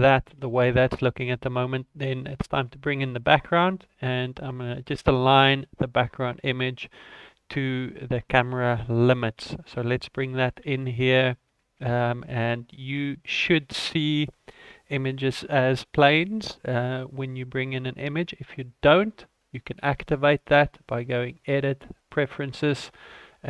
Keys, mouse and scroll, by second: 2.4 ctrl+s, 2.9 scroll down 7, 3.1 scroll up 4, 3.6 shift+middle click, 9.9 click, 10.7 shift+a, 20.9 click.